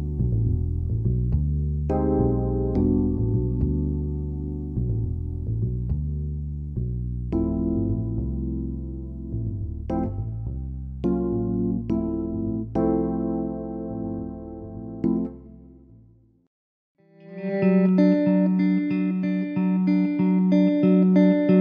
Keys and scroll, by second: 9.3 ctrl+-, 9.7 ctrl+0, 10.4 ctrl+=, 20.2 Down.